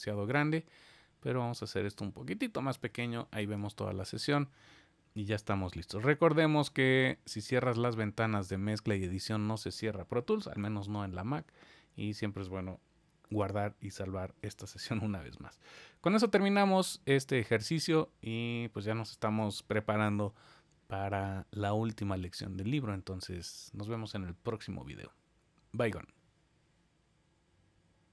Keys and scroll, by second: 2.7 super+s, 13.2 super+s.